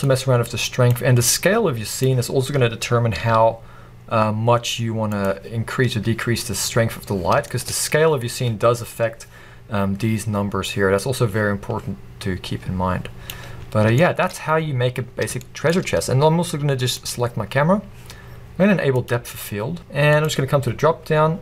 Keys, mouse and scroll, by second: 0.1-5.3 drag, 2.3-2.7 scroll down 1, 3.2 g, 7.5-10.7 shift+middle drag, 8.1-8.6 scroll up 1, 9.8-10.3 scroll down 1, 10.7-14.0 drag, 13.6-14.0 scroll up 1, 14.0-17.2 shift+middle drag, 15.0-15.4 scroll up 2, 17.2 click, 19.9 click.